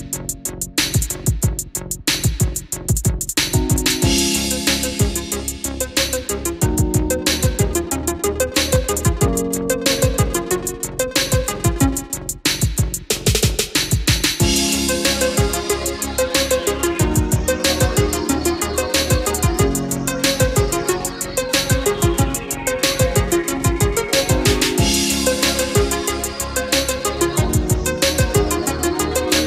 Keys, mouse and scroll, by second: 3.3 F8, 3.3-14.2 drag, 20.1 KP_1, 22.0 BackSpace, 23.9 KP_1, 25.4 click.